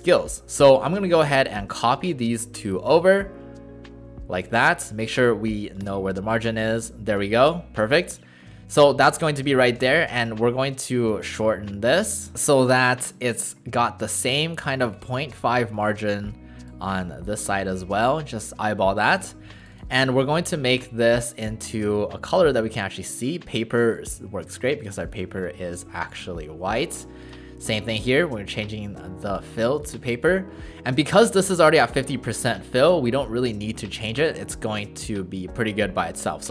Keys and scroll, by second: 4.8 w, 9.8 w, 19.1 w.